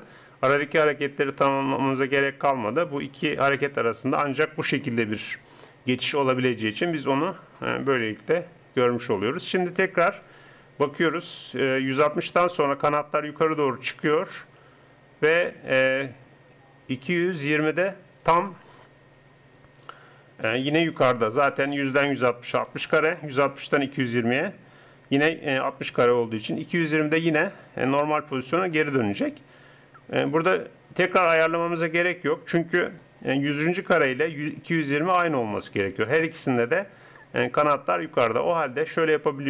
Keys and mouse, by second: 33.8-35.8 drag.